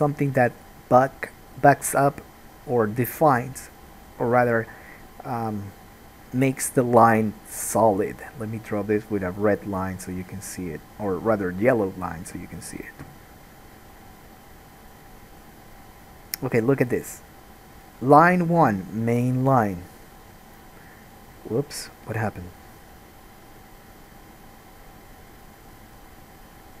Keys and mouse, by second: 3.1 click, 4.1-5.1 drag, 9.4 click, 10.1 click, 10.4-15.0 drag.